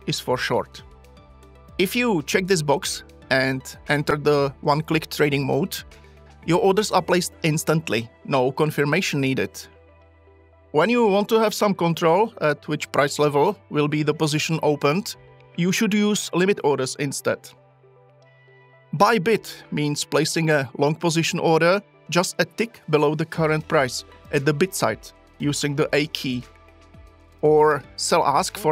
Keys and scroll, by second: 28.6 a.